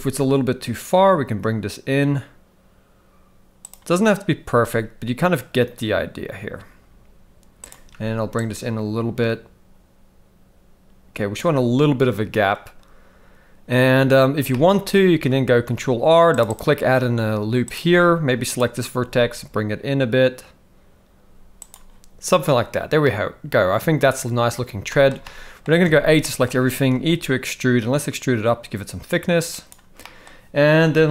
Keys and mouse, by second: 4.7 g, 8.4-11.4 shift+drag, 14.5 shift+middle click, 15.6 ctrl+r, 18.5 click, 18.9 g, 23.0-24.5 middle drag, 24.9 shift+middle click, 25.2 middle click, 25.9 a, 26.2 shift+middle click, 26.9 e, 30.0 middle click, 30.2 typing.